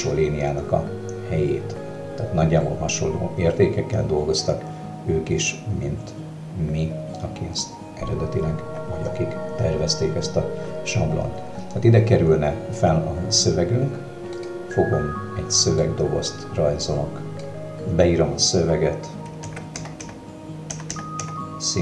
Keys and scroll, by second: 19.5-21.2 typing.